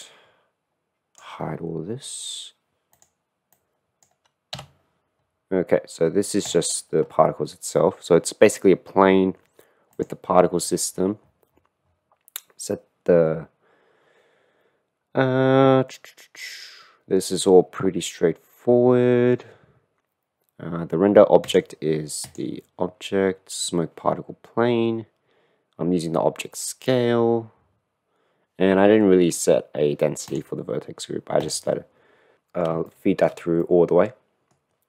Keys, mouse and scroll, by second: 2.9 click, 3.8 click, 4.7 h, 5.2 middle click, 6.4 click, 10.0 click, 21.6 click, 32.3 middle click, 32.8-33.3 shift+middle drag, 33.6-34.8 middle drag.